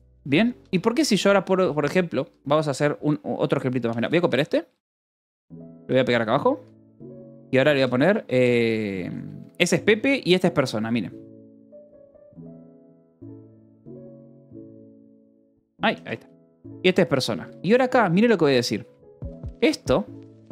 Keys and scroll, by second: 0.0-2.6 typing, 3.9-9.4 typing, 10.8-15.0 typing, 13.8 Escape, 14.6 Escape, 15.6 Escape, 17.0-20.5 typing.